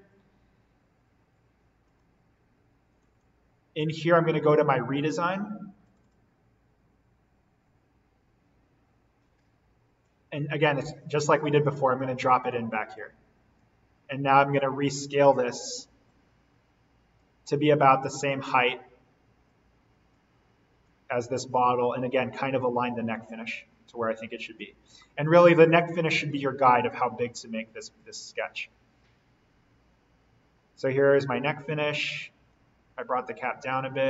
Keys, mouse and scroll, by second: 1.8 click, 5.8 click, 11.1-12.9 scroll up 1, 12.9 click, 14.0-16.0 scroll down 1, 16.0-18.2 drag, 18.2-19.4 scroll down 1, 19.4 click, 20.3-20.8 scroll down 1, 20.8 click, 21.6-22.2 scroll down 1, 22.2-24.8 drag, 24.8-26.0 scroll up 1, 26.0-27.4 drag, 27.4-27.9 scroll down 1, 27.9-34.0 drag, 32.9-34.0 scroll up 1.